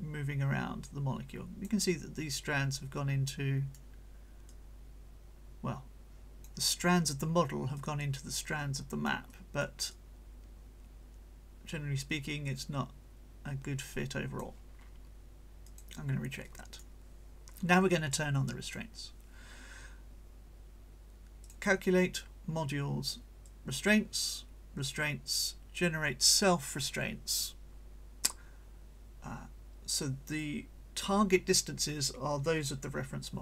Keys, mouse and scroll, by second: 0.0-1.8 drag, 3.0 right click, 4.5-6.6 drag, 7.8-9.2 drag, 9.2 right click, 9.9-14.6 drag, 15.6 click, 16.4 right click, 18.1-18.9 drag, 21.4 click, 23.5 click, 24.8 click.